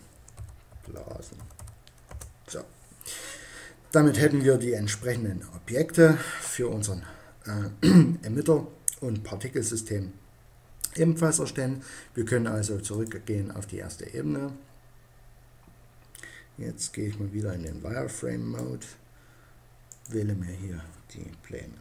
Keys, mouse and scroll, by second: 12.4-14.3 drag, 14.3-16.4 middle drag, 17.1 click, 19.4-21.1 right drag, 21.1 middle click.